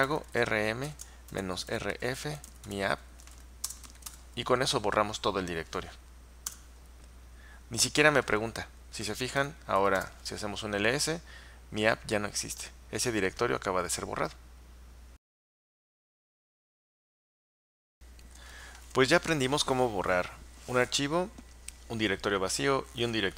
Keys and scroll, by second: 0.0-4.5 typing, 6.3-7.1 typing, 9.6-10.4 typing.